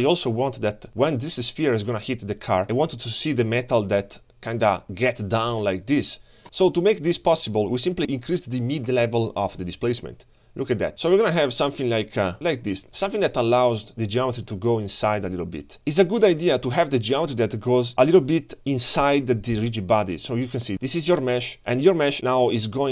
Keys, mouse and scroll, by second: 2.4-6.4 drag, 6.8 click, 9.4-10.9 drag, 11.3-16.2 drag, 16.6-17.3 scroll up 4, 19.8-20.4 scroll up 1, 20.4 click.